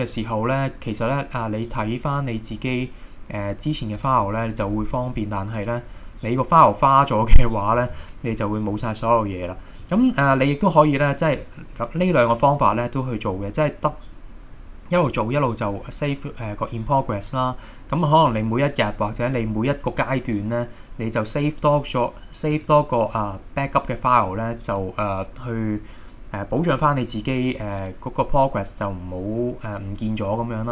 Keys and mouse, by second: 2.6 click, 15.0 click, 22.5-24.0 drag.